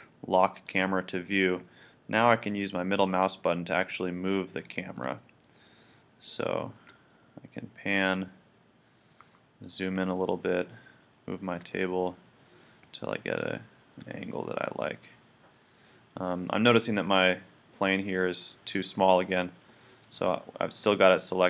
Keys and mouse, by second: 0.1-2.1 middle drag, 0.6-2.5 drag, 2.9 middle click, 5.4-7.6 middle drag, 7.9 middle click.